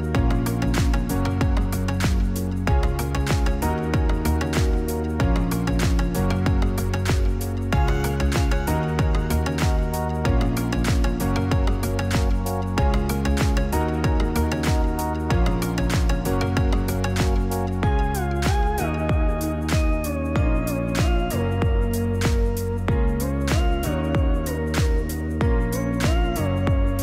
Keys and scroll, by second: 12.0 r, 18.2 ctrl+z.